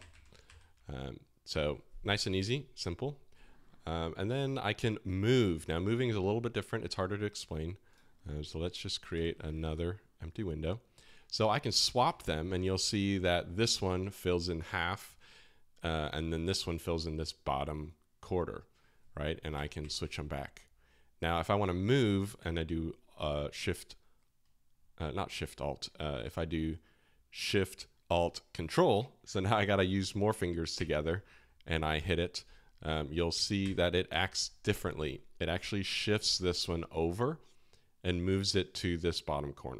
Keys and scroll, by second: 0.1 alt+shift+h, 0.4 alt+shift+l, 9.1 super+n, 11.7 alt+shift+l, 19.8 alt+shift+l, 33.6 ctrl+alt+shift+l.